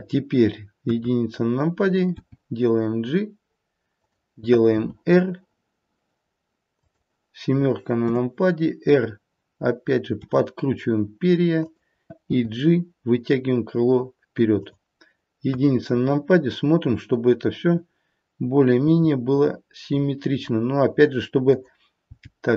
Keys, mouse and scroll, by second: 0.7 KP_1, 2.1 g, 4.7 r, 8.0 KP_7, 10.1 r, 12.3 g, 15.5 KP_1, 18.8 g, 22.0 g.